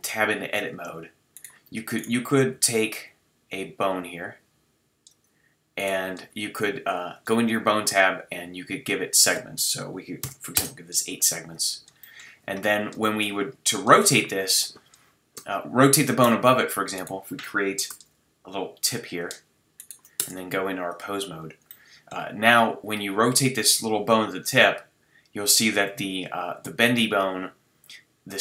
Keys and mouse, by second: 2.5 g, 12.0-13.9 middle drag, 16.9-19.2 right drag, 17.9 e, 19.8-21.2 right drag, 20.2 Tab, 22.9-23.5 middle drag, 23.5-25.7 drag.